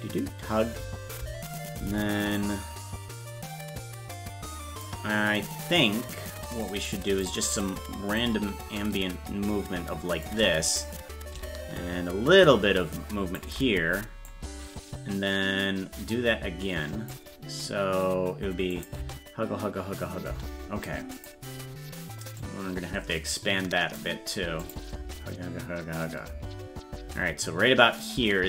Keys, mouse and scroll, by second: 2.3-4.8 drag, 6.6 click, 8.1-10.2 drag, 10.7-13.4 drag, 14.3-17.1 drag, 18.8 click, 19.0 space, 21.2 click, 22.4-24.0 drag, 24.7 click, 25.0 space, 28.1-28.4 drag.